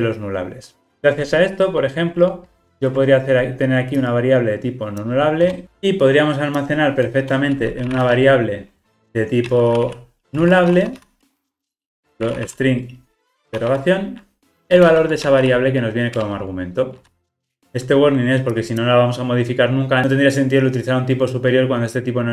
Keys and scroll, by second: 16.3 Return.